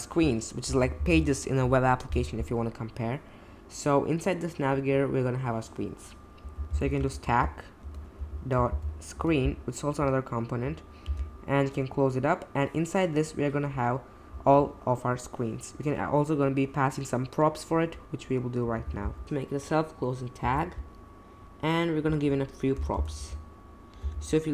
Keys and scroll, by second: 6.7 shift+,, 7.2 shift+s, 7.8 Return, 8.1 ., 8.7 shift+s, 9.1 Return, 11.0 shift+., 20.4 /, 22.8 typing, 24.0 BackSpace.